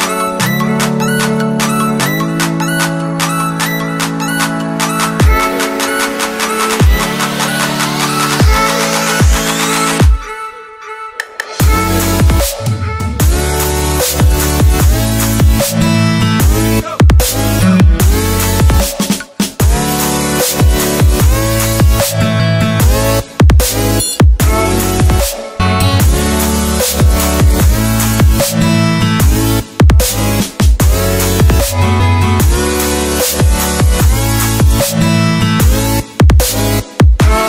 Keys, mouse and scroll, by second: 0.0 click, 0.3 scroll up 1, 0.7 click, 0.8 right click, 1.3 click, 1.4 scroll up 1, 2.1 click, 7.3 alt+Tab, 7.8 click, 8.5 Tab, 9.1 v, 9.7 click, 10.1 t, 10.5 click, 11.7 click, 13.8 Delete, 14.7 click, 15.3 c, 15.5 click, 15.9 v, 16.7 t, 17.3 click, 21.6 Return, 22.0 click.